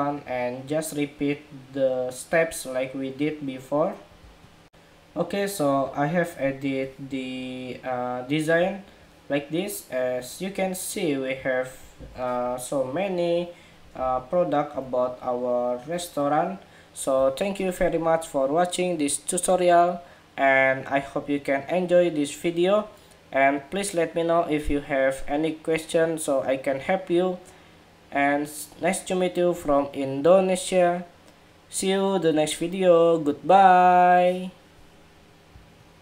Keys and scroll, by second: 11.7 super+=, 12.2 super+=, 13.8 super+-, 15.1 super+-, 35.8 shift+super+2.